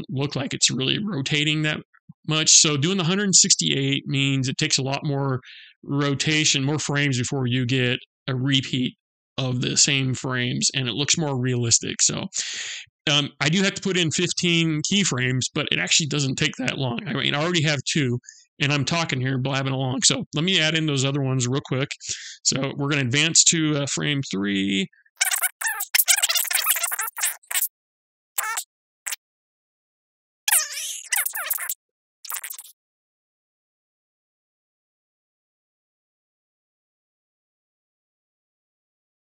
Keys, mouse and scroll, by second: 23.6 Right, 24.8 r, 25.8 ctrl+z, 26.3 r, 27.0 i, 27.4 KP_0, 28.7 KP_0, 29.2 Right, 29.6 Left, 29.7 Right, 30.6 Left, 30.8 Right, 31.0-38.9 typing, 32.2 Right, 33.1 Right, 34.3 Right, 35.4 Right, 36.5 Right, 37.6 Right, 38.8 Right.